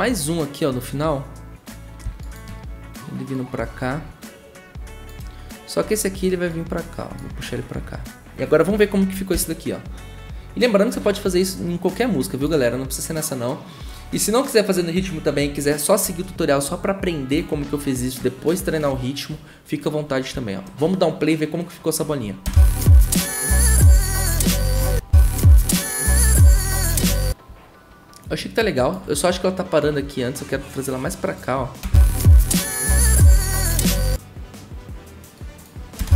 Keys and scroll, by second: 9.3 shift+`, 22.4 0, 24.8 0, 31.8 0, 33.8 0.